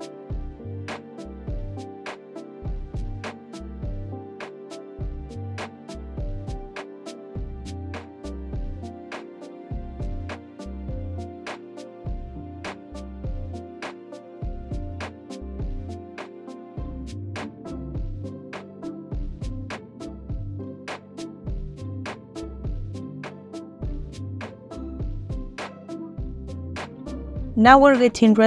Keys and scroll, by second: 3.3 ctrl+p, 4.0 space, 6.5 space, 14.6 ctrl+p, 16.1 space, 19.8 ctrl+space.